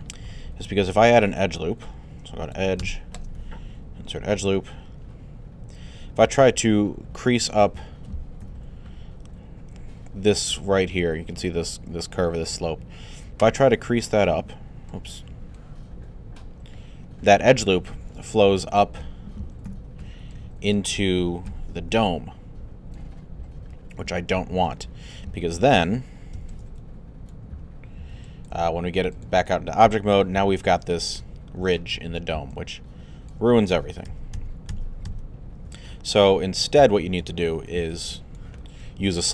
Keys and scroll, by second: 8.4 alt+2, 19.7 alt+3, 20.3 alt+3, 21.5 alt+f, 26.3 q, 33.7 alt+z, 35.7 alt+z.